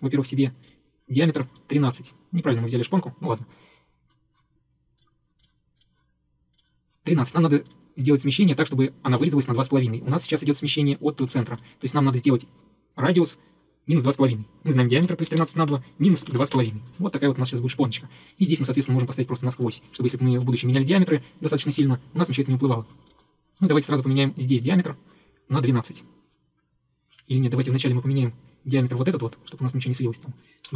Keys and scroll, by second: 14.8-16.9 typing, 27.6 Escape, 30.7 1.